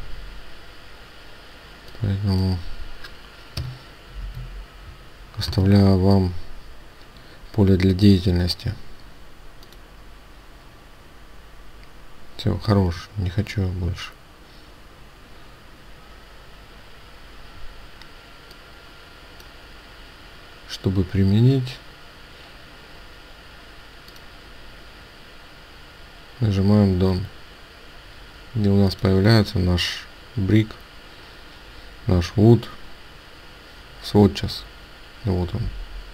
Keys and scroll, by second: 5.4 Return.